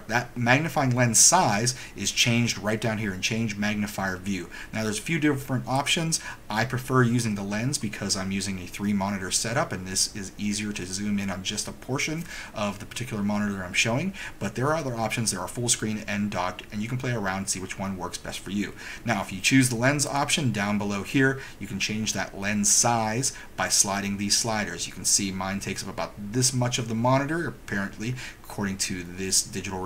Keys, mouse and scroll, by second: 5.9 click, 20.2 click.